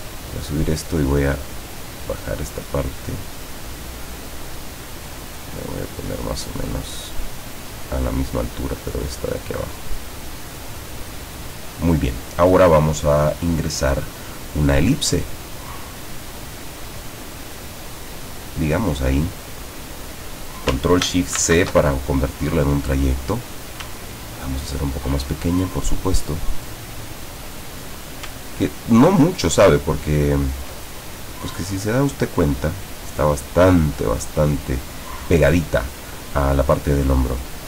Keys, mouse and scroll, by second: 1.6 click, 4.8 click, 8.8 click, 14.0 click, 16.3 click, 21.5 ctrl+shift+c, 23.0 click, 24.1 ctrl+click, 26.2 click, 28.6-30.9 ctrl+drag, 31.1-33.7 ctrl+drag.